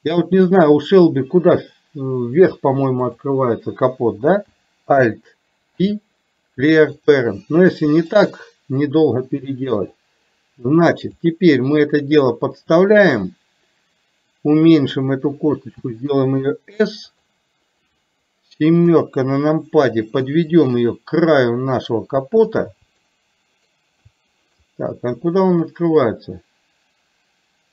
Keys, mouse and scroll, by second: 3.2 click, 5.8 alt+p, 8.2-9.3 drag, 10.1-11.2 drag, 13.3-15.0 drag, 18.8 KP_7, 20.6-22.6 drag, 23.1 shift+middle click, 24.7-27.7 middle drag.